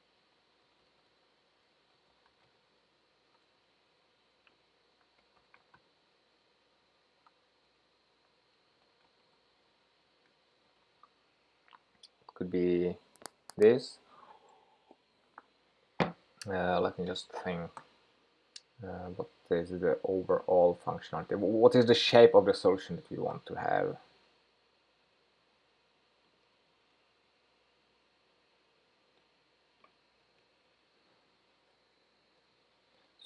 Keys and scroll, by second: 23.0 ctrl+shift+k, 27.5 super+v.